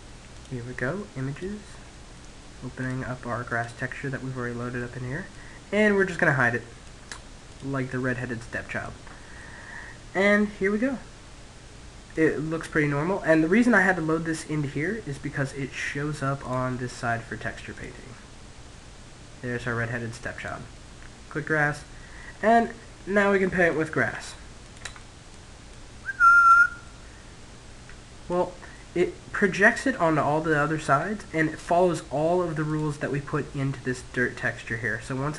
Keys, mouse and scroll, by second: 1.5 middle click, 2.3 click, 7.2 click, 8.9-10.7 middle drag, 14.9-16.8 middle drag, 16.0-17.3 drag, 21.2-23.8 middle drag, 23.6 f, 24.2-27.2 drag, 27.0-31.0 middle drag, 32.3 click.